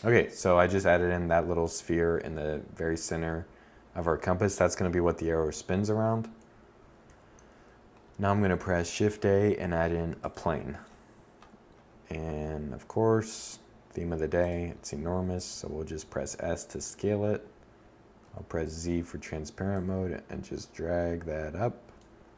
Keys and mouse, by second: 1.5-3.9 middle drag, 5.4 a, 7.0 shift+a, 11.2 s, 15.1 1, 16.5 z, 20.9 KP_7, 21.8 Tab.